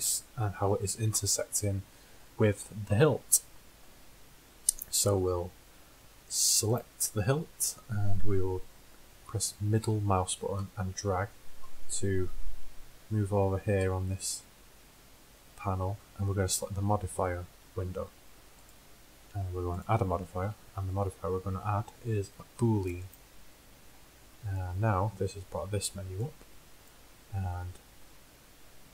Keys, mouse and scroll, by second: 0.1 h, 6.9-8.8 middle drag, 11.0-16.2 middle drag, 18.6-21.7 drag, 26.2-28.2 drag.